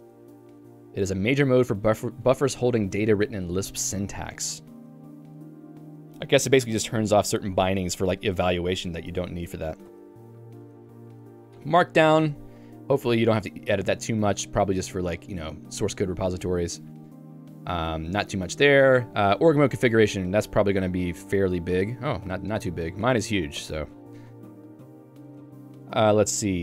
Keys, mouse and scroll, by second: 0.2 Return, 0.8 j, 10.0 q, 11.0 Escape, 11.0 j, 11.9 Home, 12.2 Tab, 13.9 j, 15.7 k, 16.7 j, 19.3 Tab, 19.6 j, 20.1 ctrl+d, 20.4 ctrl+d, 21.9 ctrl+u, 22.4 ctrl+u, 24.0 j.